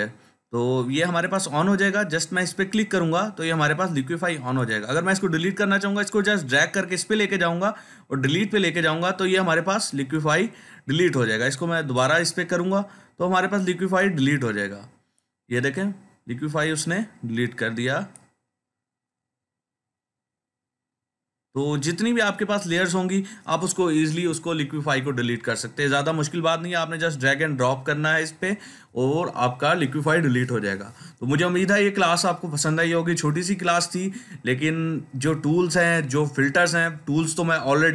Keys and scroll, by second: 23.9 Delete.